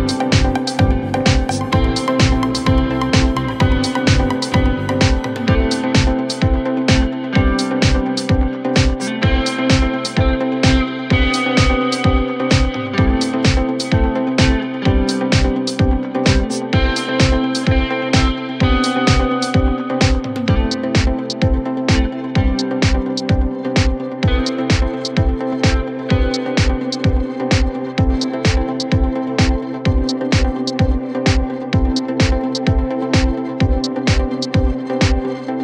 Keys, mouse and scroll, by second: 0.1 scroll down 1, 0.3 scroll up 1, 1.2 middle click, 1.4 scroll down 1, 1.6 middle click, 1.9-3.1 scroll up 2, 7.3 middle click, 7.6 scroll up 8, 8.8 scroll down 10, 9.0 space, 10.0 Delete, 17.3 scroll down 1, 18.5 scroll down 7, 18.8 middle click, 19.0-19.6 scroll up 10, 19.9 scroll down 3, 19.9 middle click, 23.1 right click, 24.3 m, 25.8 middle click, 26.0 space, 27.2 double click, 28.0 right click, 30.0 scroll up 4, 30.6 double click, 31.6 b, 32.1 alt+click, 33.1 space, 34.0 b.